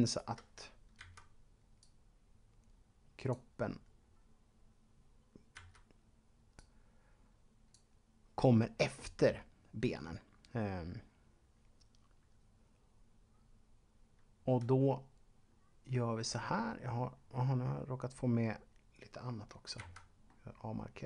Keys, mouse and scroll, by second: 1.0 b, 1.8 click, 3.6-5.5 scroll down 2, 5.5 b, 6.5 click, 15.4-17.1 scroll up 2, 17.1-17.6 scroll down 1, 18.0-19.6 scroll down 1, 19.8 b, 20.3 middle click.